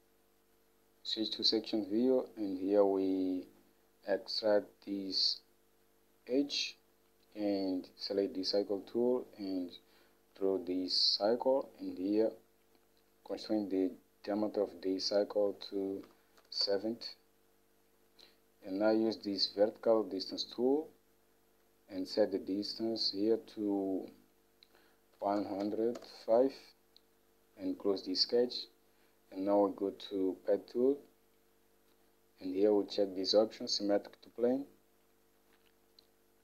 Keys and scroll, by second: 16.0-17.4 typing, 25.1-26.4 typing.